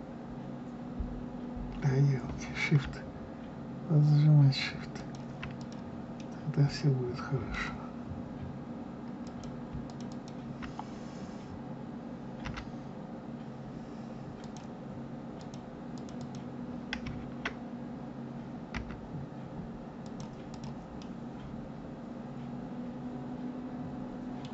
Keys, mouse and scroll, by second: 5.6 click, 6.1-9.2 middle drag, 9.2 click, 9.8 shift+click, 10.1 shift+click, 12.4 g, 15.3 click, 15.9 click, 16.1 click, 18.7 g, 20.4 click, 21.0-24.1 middle drag.